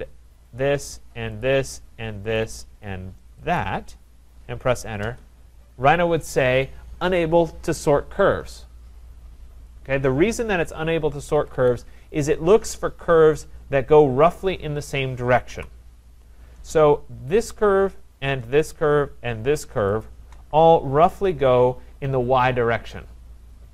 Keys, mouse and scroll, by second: 0.6 click, 1.4 click, 2.4 click, 3.6 click, 5.0 Return, 11.3 Escape, 11.6 Escape, 12.3 click, 15.5 Delete, 17.5 click, 18.8 shift+click, 20.0 shift+click.